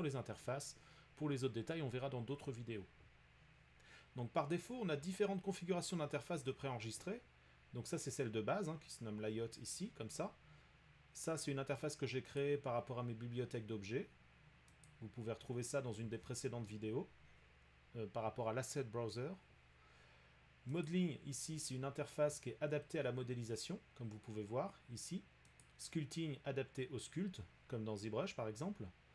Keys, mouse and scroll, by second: 12.4-17.4 drag, 20.8 click, 25.7-26.9 drag.